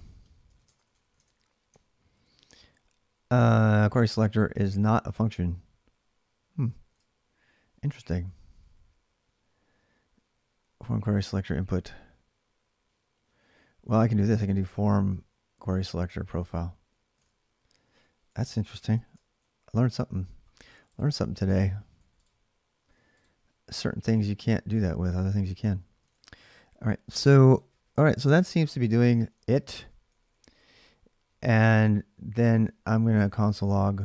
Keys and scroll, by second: 0.0-0.9 typing, 1.9 ctrl+r, 6.7 alt+Tab, 7.7 ctrl+[, 7.9 k, 8.0 k, 10.4-10.7 h, 13.2-16.2 typing, 16.9 alt+Tab, 18.7 ctrl+r, 19.4-25.5 typing, 25.8 alt+Tab, 28.9-34.0 typing.